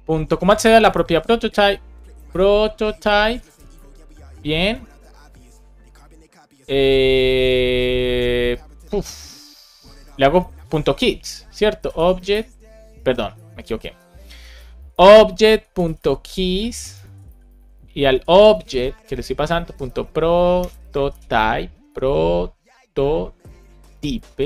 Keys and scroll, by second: 0.7 BackSpace, 3.3 Down, 3.7 Return, 8.6 super+Left, 9.3 Down, 9.9 Right, 11.4 shift+o, 13.2 BackSpace, 16.3 shift+9, 16.9 super+Right, 17.1 Left, 20.5 BackSpace, 21.7 BackSpace, 24.2 shift+o.